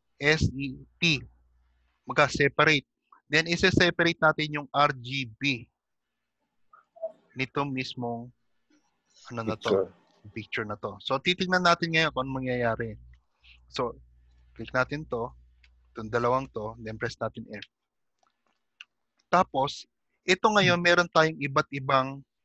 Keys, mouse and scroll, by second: 14.1 scroll up 3, 17.7 f, 18.5 click, 18.9 g, 19.9 shift+middle click.